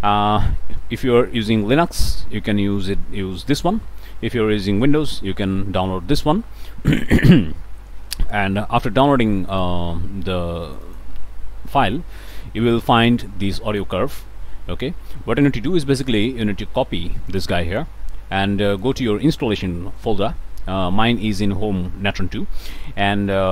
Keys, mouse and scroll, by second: 1.5-2.0 scroll up 1, 8.3 click, 9.5 click, 10.6 click, 13.7 click, 15.8-16.1 scroll up 2, 17.3 click, 17.7 click, 18.7 click, 22.6 click.